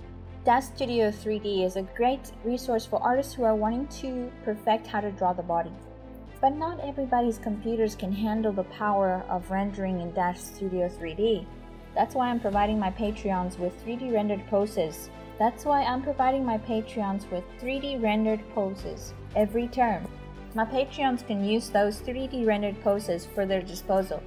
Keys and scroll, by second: 0.0-2.1 typing, 4.0-23.4 typing, 23.8 ctrl+z.